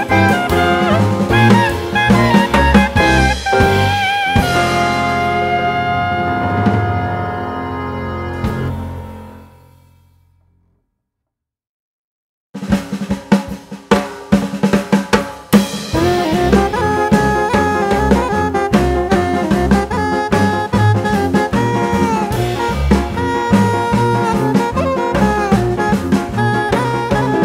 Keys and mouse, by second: 3.1 click, 10.5 click, 11.1 click, 11.1-13.7 shift+drag, 14.6-16.1 drag, 15.4 0, 17.0-18.0 drag, 18.7 click, 20.2-21.3 drag, 22.0 click, 24.0 click, 25.7 click, 27.0-27.4 drag.